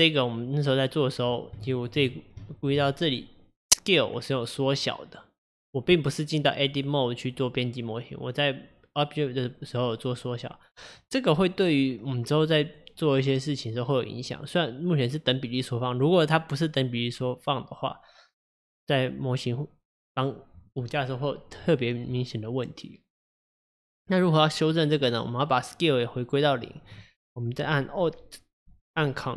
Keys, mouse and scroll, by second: 1.7 shift+middle click, 2.1-2.6 scroll up 2, 2.6-5.5 shift+middle drag.